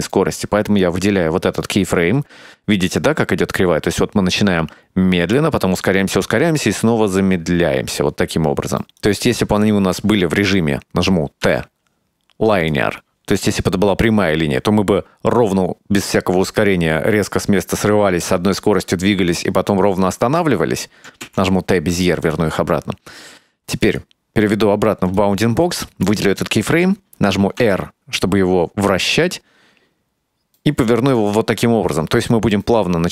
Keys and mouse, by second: 0.9 right click, 9.1 right click, 11.5 t, 21.3 t, 24.1-25.6 drag, 26.2 right click, 27.7 r, 32.4-33.1 drag.